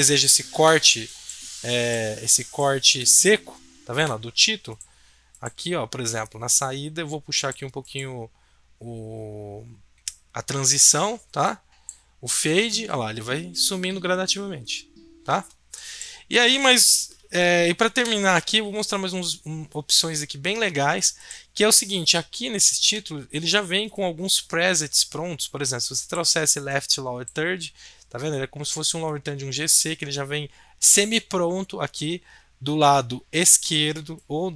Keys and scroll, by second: 17.9 BackSpace.